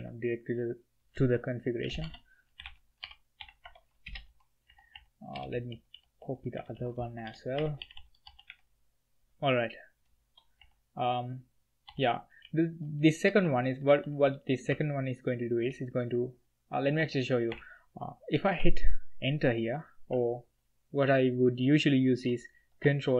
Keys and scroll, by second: 1.2-3.4 typing, 3.6 Tab, 4.0 Return, 4.7-9.3 typing, 10.6 k, 11.9-15.6 typing, 16.9 j, 17.2 k, 17.7 i.